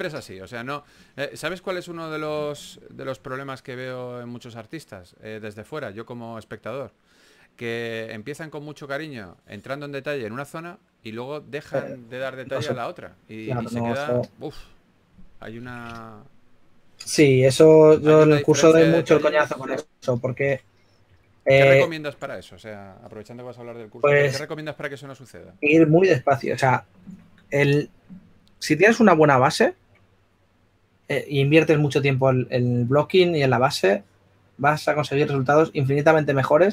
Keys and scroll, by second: 2.1-4.9 typing, 6.0 typing, 8.3 typing, 14.1 s, 16.1-16.9 typing, 20.6-21.1 typing, 23.1-23.9 typing.